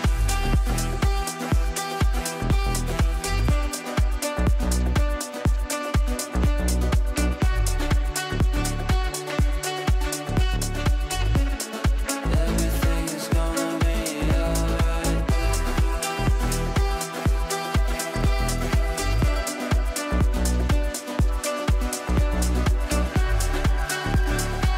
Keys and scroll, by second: 6.2 shift+F2, 6.5 Escape, 6.8 w, 7.6 shift+F2, 19.4 ctrl+z, 20.2 ctrl+z.